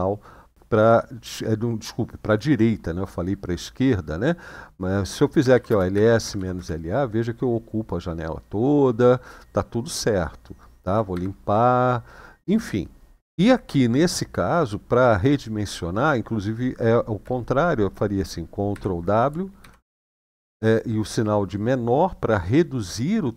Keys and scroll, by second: 5.2-6.3 typing, 10.9 ctrl+l, 18.5 ctrl+w, 19.3 <.